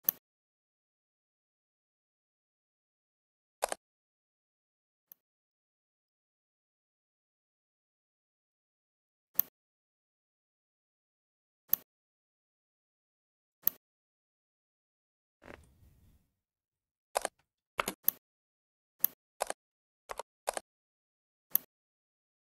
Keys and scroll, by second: 17.6 space.